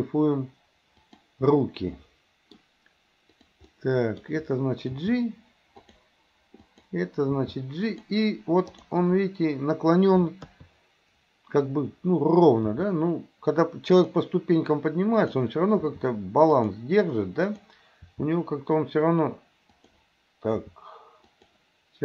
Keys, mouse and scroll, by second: 1.6-2.6 middle drag, 3.3 drag, 3.7-4.3 middle drag, 5.1 g, 6.7 click, 7.4 g, 10.2 KP_2, 10.4 KP_3, 12.7 r, 15.2 click, 15.9 r, 17.5 click, 18.1 r, 20.5 r.